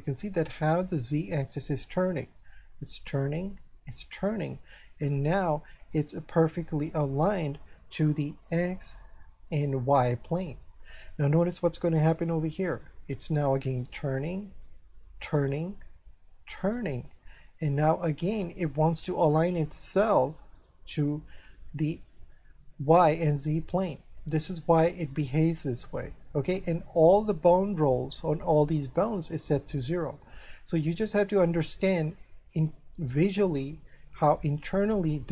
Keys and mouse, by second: 2.9 shift+right click, 4.2 shift+right click, 5.3 shift+right click, 5.9 middle click, 11.3 middle click, 13.8 shift+right click, 14.3 middle click, 15.2 shift+right click, 16.6 shift+right click, 17.1 shift+middle click, 20.6 shift+right click, 23.2 middle click, 26.6 shift+middle click, 31.6 shift+middle click, 32.7 middle click, 34.5 shift+middle click.